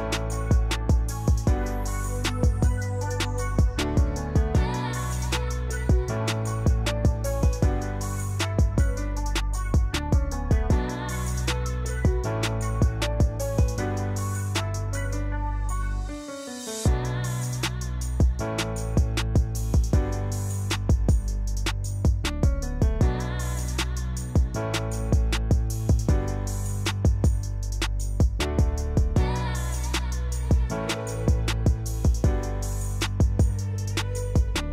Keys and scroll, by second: 5.9 ctrl+z, 8.8 Escape, 14.2 Escape, 26.7-28.2 typing, 34.2-34.7 typing.